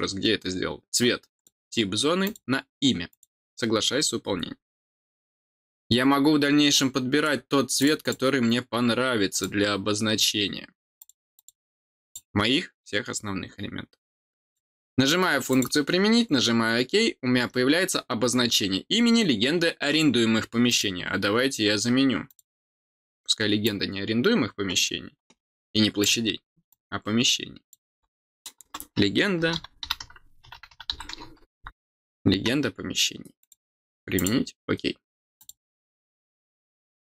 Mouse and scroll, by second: 1.3 click, 2.2 click, 3.1 click, 5.5 click, 6.7 click, 7.7 click, 8.0 click, 9.3 click, 10.9 click, 11.3 click, 12.0 click, 14.4 click, 15.5 click, 17.3 middle click, 17.3 scroll down 2, 20.6 click, 22.2 click, 23.6-26.0 drag, 26.6-27.7 drag, 33.4 click, 34.1 click, 35.3 click.